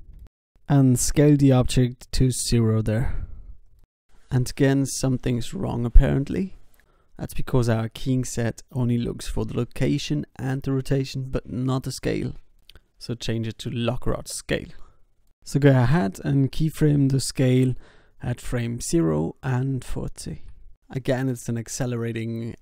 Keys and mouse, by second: 0.9 s, 1.8 i, 2.8 alt+a, 4.5 alt+a, 5.8 ctrl+z, 6.4 ctrl+z, 7.0 ctrl+z, 10.6 click, 13.1 i, 13.7 shift+s, 16.0 s, 17.3 i, 17.9 alt+a, 19.4 alt+a.